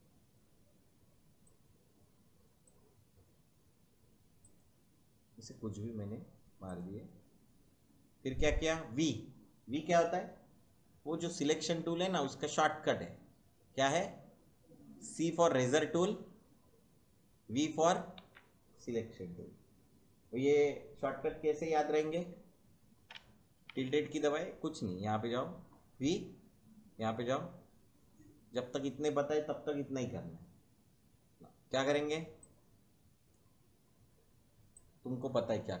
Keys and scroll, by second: 11.2 v, 15.7 c, 18.2 v, 23.6 `.